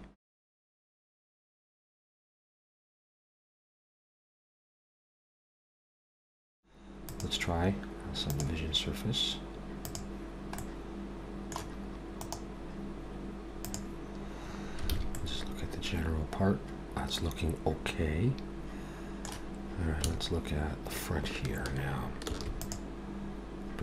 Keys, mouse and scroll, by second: 0.4 middle click, 0.7 ctrl+r, 1.6 ctrl+r, 1.9 shift+middle click, 2.1 middle click, 2.2 scroll up 2, 2.4 ctrl+r, 3.0 ctrl+r, 3.4 shift+middle click, 3.5 middle click, 3.7 ctrl+r, 4.3 ctrl+r, 4.7 middle click, 4.9 shift+middle click, 5.0 middle click, 5.3 ctrl+r, 5.8 ctrl+r, 6.3 Tab, 6.3 scroll down 3, 6.4 middle click, 7.1 click, 9.9 click, 10.6 middle click, 12.2 right click, 14.9 alt+a, 15.1 middle click, 20.0 Tab, 22.3 ctrl+r.